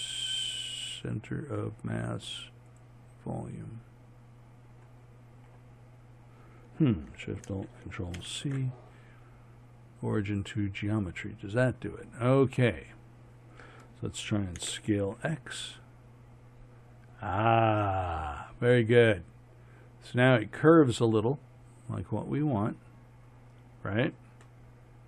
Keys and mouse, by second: 5.4 middle click, 5.5 click, 8.2 ctrl+alt+shift+c, 14.6 s, 18.9-21.0 middle drag, 24.6-25.0 middle drag.